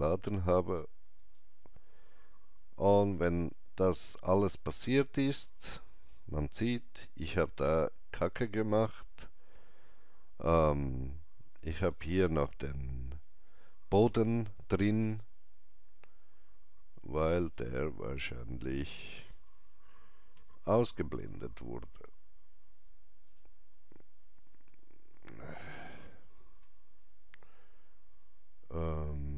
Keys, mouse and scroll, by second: 1.2 click, 6.5-14.5 drag, 17.4-23.3 alt+drag, 23.3 right click.